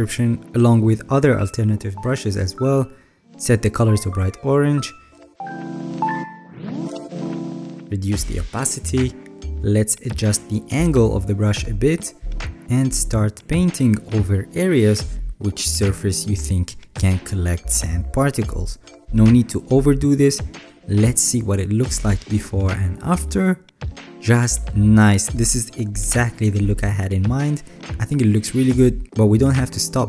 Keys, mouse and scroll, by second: 8.4-9.8 alt+scroll, 17.1 alt+right click, 17.1 alt+scroll, 20.1 alt+right click, 20.6 alt+scroll, 20.8-21.1 scroll down 6, 21.1 alt+scroll, 22.5 alt+scroll, 24.0-30.0 scroll down 10.